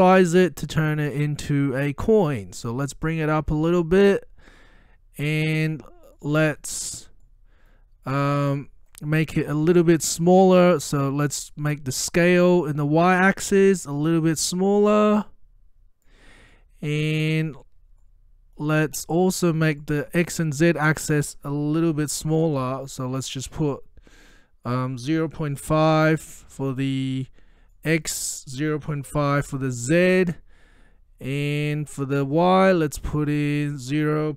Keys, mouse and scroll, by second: 2.4 click, 2.4-4.3 drag, 4.7-5.6 middle click, 5.6-6.3 scroll up 1, 6.3-6.8 middle click, 6.8-7.4 scroll up 1, 7.4-7.9 middle drag, 11.5-16.1 drag, 16.6-17.2 middle click, 17.3 scroll up 1, 18.1-18.7 middle drag, 19.9-20.5 drag, 21.9 Delete, 25.6-26.5 typing, 27.8-28.4 drag, 28.9-30.0 typing, 30.9-31.3 scroll up 1, 31.3-32.6 middle drag, 33.5-34.0 drag.